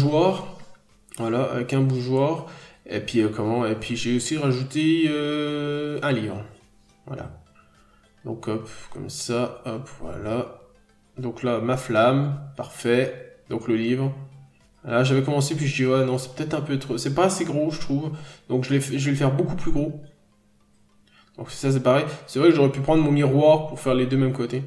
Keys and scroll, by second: 1.5 ctrl+z, 4.0 scroll down 1, 4.2-4.9 scroll up 2, 4.4 n, 4.9 b, 8.6 scroll down 1, 9.8 n, 9.9 ctrl+z, 10.2 b, 10.9-11.2 scroll down 1, 11.5 n, 11.7-12.0 scroll up 1, 12.7 scroll up 1, 14.7 ctrl+z, 16.8-17.3 scroll down 1, 17.3 n, 17.8 scroll up 1, 18.1 ctrl+z, 18.5 b, 19.9 ctrl+z, 20.6 ctrl+z, 21.6 ctrl+z, 22.3 scroll down 1, 22.6 scroll up 1, 23.8 ctrl+z, 24.4 scroll down 1.